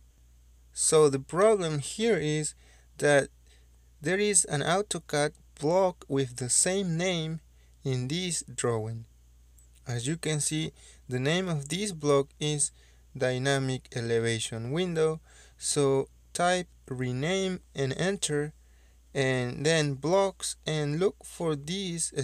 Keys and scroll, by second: 10.0 Escape, 12.2 Escape, 13.5 Escape, 15.9 Escape, 16.4 Escape, 16.7-18.7 typing, 18.5 Return, 19.7-21.0 typing.